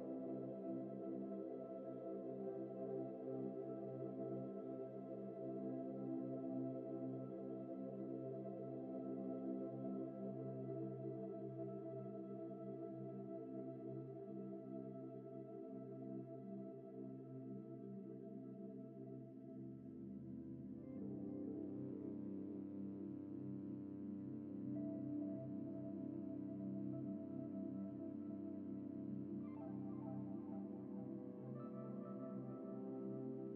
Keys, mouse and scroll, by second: 0.5 shift+middle click, 2.0 typing, 2.9 ctrl+l, 3.4 g, 9.0 middle click, 9.4 g, 10.3 right click, 10.7 middle click, 11.0-11.4 scroll down 1, 14.3-14.6 scroll down 1, 14.6 Tab, 15.4-16.0 scroll down 1, 16.0 shift+middle click, 17.7 scroll up 1, 18.1 shift+middle click, 20.8-21.2 typing, 28.4-29.1 typing, 30.6 typing, 31.6-32.0 scroll up 1, 32.0 typing.